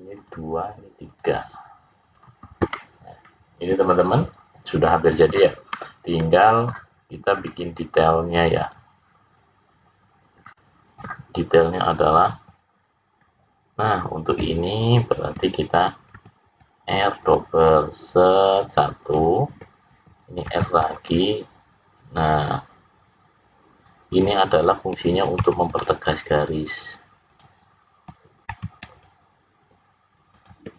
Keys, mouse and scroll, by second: 0.1 click, 1.0 click, 2.1 click, 2.7 middle click, 7.3 scroll down 1, 7.4-8.1 scroll up 3, 8.6 click, 10.4 middle click, 12.1 click, 13.2 scroll up 2, 16.1 ctrl+r, 20.4 ctrl+r, 25.3 ctrl+r, 28.4 ctrl+r.